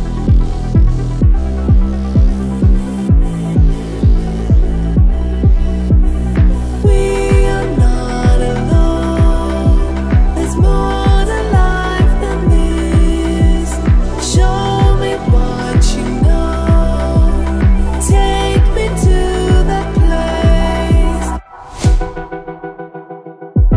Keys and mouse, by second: 0.3 e, 4.6 click, 6.5 click, 9.7 middle click, 11.5 click, 15.2-16.3 middle drag, 16.7 middle click, 18.5 click, 19.5 middle click, 21.6 click, 22.8 x.